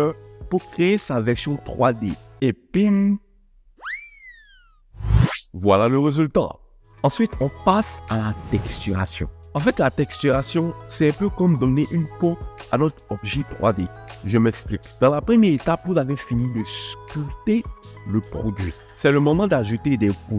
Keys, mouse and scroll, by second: 1.4 KP_1, 1.7 alt+z.